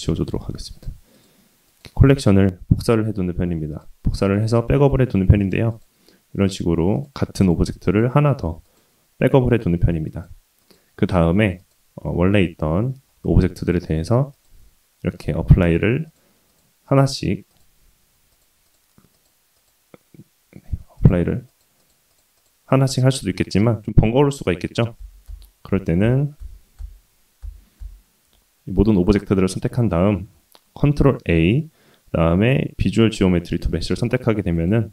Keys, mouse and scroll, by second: 0.7 click, 1.1 click, 1.7-3.0 right drag, 3.7 click, 4.1 click, 5.4 click, 5.7 click, 6.9 click, 7.4 click, 7.8 click, 8.7 click, 10.0 click, 10.6 click, 11.6 click, 12.5 scroll up 1, 12.6-13.2 scroll down 1, 13.2-13.7 drag, 13.2-13.7 scroll down 1, 14.3 click, 15.6-16.1 drag, 16.5-17.1 drag, 17.5 click, 18.3 click, 19.1 click, 19.5 click, 20.9 click, 21.4 click, 22.1 click, 22.3-23.1 drag, 23.5 click, 24.6 ctrl+z, 25.0 ctrl+z, 25.3 ctrl+z, 25.7 ctrl+z, 26.0 ctrl+z, 26.8 ctrl+z, 27.5 ctrl+z, 28.7-29.3 drag, 30.8 ctrl+a, 34.5 click.